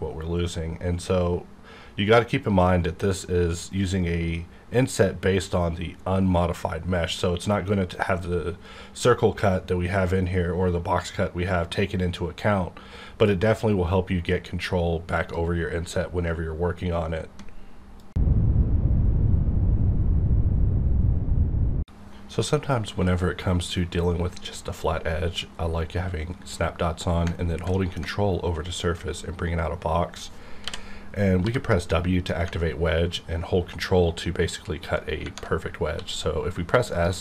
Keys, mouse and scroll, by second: 15.2 click, 28.0 ctrl+Num_Lock, 28.8 ctrl+click, 28.9-30.6 ctrl+drag, 30.6-31.4 typing, 35.2 ctrl+-, 36.1 s, 36.9 click.